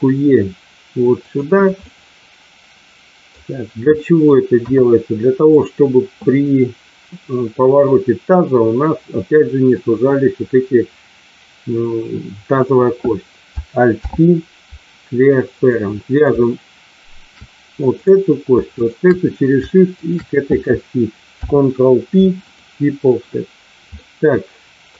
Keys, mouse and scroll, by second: 1.1 click, 1.8-3.3 middle drag, 3.9 middle click, 4.6 KP_1, 5.4 click, 13.9 alt+p, 17.9 click, 18.7 shift+click, 19.9 shift+click, 21.3 ctrl+p, 23.9-24.9 middle drag.